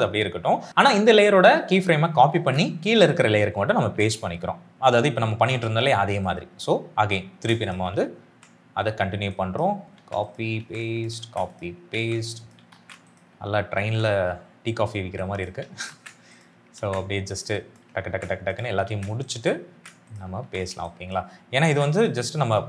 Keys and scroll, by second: 2.2 ctrl+c, 3.7 ctrl+v, 7.2 ctrl+c, 8.2 ctrl+v, 9.9 ctrl+c, 10.5 ctrl+v, 11.1 ctrl+c, 11.8 ctrl+v, 12.6 ctrl+c, 13.7 ctrl+v, 15.8 ctrl+c, 16.7 ctrl+v, 18.0 ctrl+c, 18.8 ctrl+v, 19.6 ctrl+c, 20.3 ctrl+v, 21.5 ctrl+c, 22.4 ctrl+v.